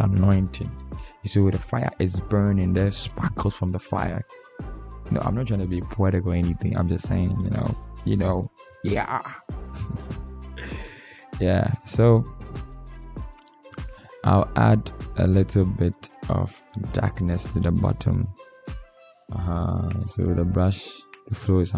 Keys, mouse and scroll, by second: 14.6 Caps_Lock, 17.2 ctrl+alt+scroll down 1, 21.4 ctrl+z.